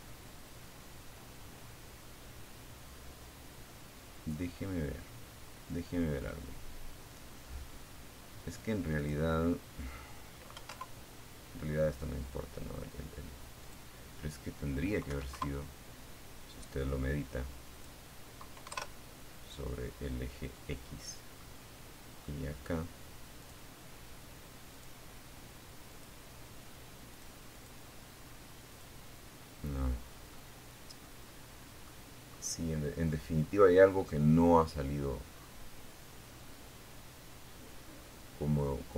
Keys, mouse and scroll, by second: 2.5-3.7 scroll down 3, 4.3 scroll down 2, 7.2 click, 8.7 KP_1, 8.9 KP_Enter, 11.9 click, 13.3 KP_1, 13.6 KP_Enter, 15.9 click, 16.9 KP_0, 16.9 KP_Enter, 19.6-20.6 middle drag, 21.6 click, 22.9 click, 24.1 click, 25.3 click, 25.7 click, 26.9 click, 28.2-28.5 scroll down 1, 28.5-30.2 middle drag, 30.5-30.8 scroll up 1, 31.6-32.1 scroll up 1, 33.5-34.8 scroll down 4.